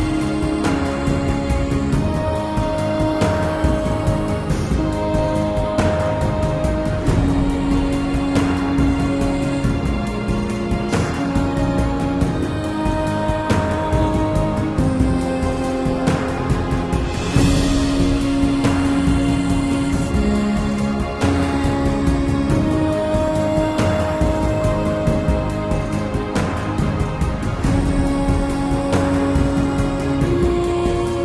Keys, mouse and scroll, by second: 3.6 super+z, 5.5 super+z, 7.1 super+z, 7.5 super+z, 10.7 super+z, 11.2 super+z, 20.6 Escape, 25.0 super+z, 26.3 super+z, 26.9 super+z, 27.4 super+z, 28.0 super+z, 28.2 super+z, 28.8 super+z, 29.1 super+z, 30.1 super+z, 30.5 super+z.